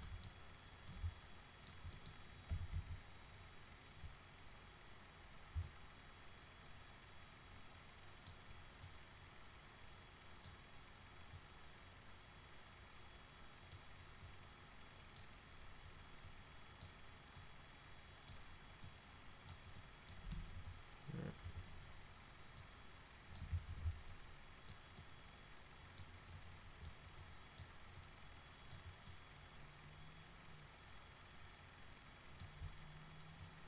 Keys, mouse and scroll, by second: 0.0 alt+middle click, 0.9 alt+middle click, 1.9 middle click, 2.2-3.2 typing, 5.7-8.3 alt+drag, 8.8-10.4 alt+drag, 11.3-13.7 alt+drag, 14.2 alt+click, 16.2 alt+click, 17.4 alt+click, 18.8 alt+middle click, 19.8 alt+middle click, 20.6 e, 21.4 w, 22.6 click, 23.5 ctrl+z, 24.1 alt+click, 25.0 alt+middle click, 26.3 alt+click, 27.2 alt+click, 27.9 alt+click, 29.1-32.4 alt+middle drag, 33.4-33.6 drag.